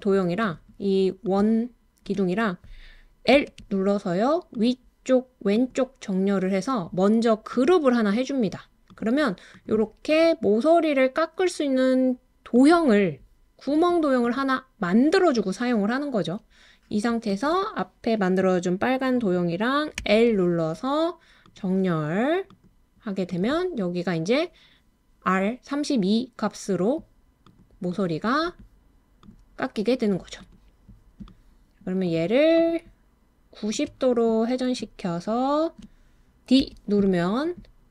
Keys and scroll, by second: 36.6 d.